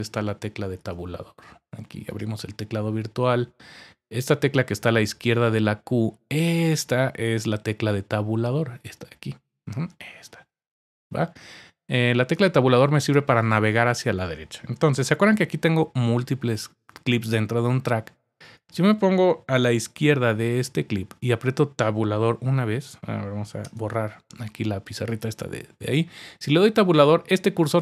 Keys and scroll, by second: 6.3 Tab, 6.4 typing, 14.8-15.2 typing, 19.6-19.9 typing.